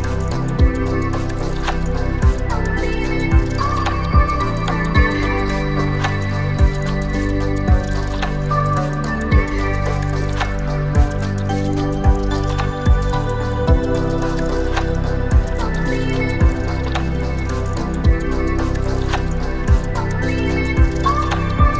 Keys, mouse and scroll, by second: 2.2 click, 2.6 click, 3.2 alt+s, 4.3 click, 4.9 click, 5.5 alt+s, 7.0 click, 7.4-7.8 scroll down 1, 7.8-9.4 middle drag, 9.4 click, 11.0 r, 15.8 click, 17.4 Tab, 17.8-18.7 scroll down 3, 18.6-21.6 middle drag.